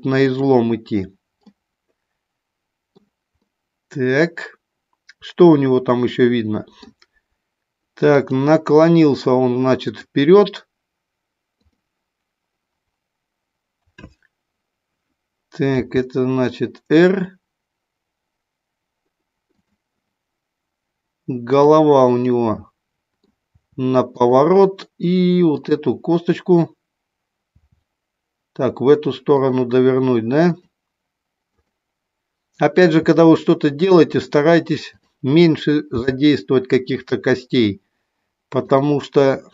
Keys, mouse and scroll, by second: 1.5-3.0 middle drag, 3.3-6.9 middle drag, 11.6 click, 15.7 r, 19.5 click, 21.5 click, 22.2-23.3 middle drag, 23.5 r, 24.2 click, 25.6 click, 27.6 r, 30.5 click, 31.6 click, 32.8 r, 34.0 click, 34.8 click, 35.8 g, 38.6 click.